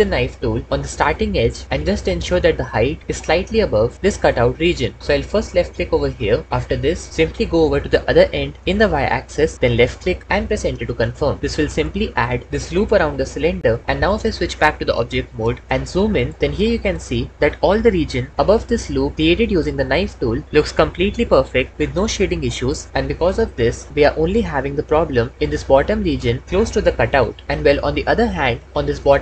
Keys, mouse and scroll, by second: 8.1 y, 10.7 Return, 13.8 Tab, 15.6 ctrl+Escape, 18.3 Tab, 19.8 Tab.